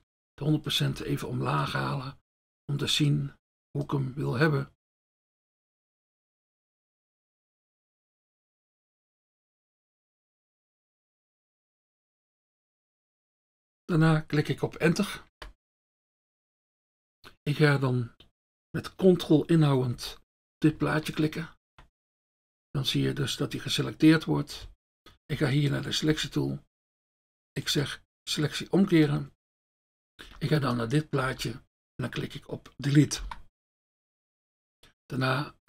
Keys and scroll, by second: 0.1 F1, 15.3 Return, 22.4 ctrl+F1, 30.7 F1, 33.2 Delete.